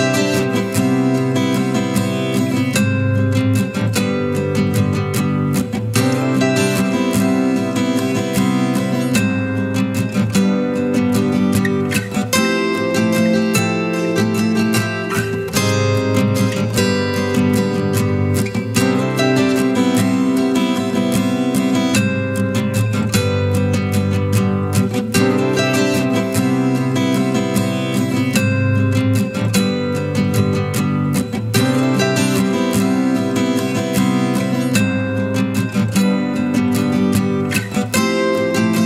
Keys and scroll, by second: 11.2 ctrl+t, 19.2 ctrl+t, 34.0 ctrl+l.